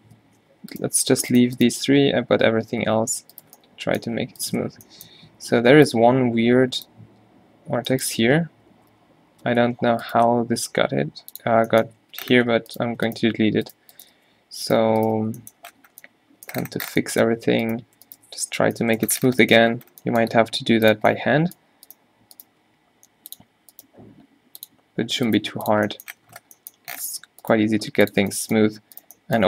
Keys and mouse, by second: 0.3 ctrl+z, 2.0 q, 2.9 ctrl+z, 4.7 q, 5.5 a, 5.7 b, 7.9 b, 8.3 q, 8.9 Tab, 9.4 Tab, 9.6 q, 10.5 x, 12.2 a, 14.3 f, 15.3 f, 15.7 Tab, 16.8 Tab, 17.5 a, 18.6 -, 20.4 g, 22.7 g, 24.0 g, 25.5 g, 26.3 Tab, 27.3 Tab, 27.6 g.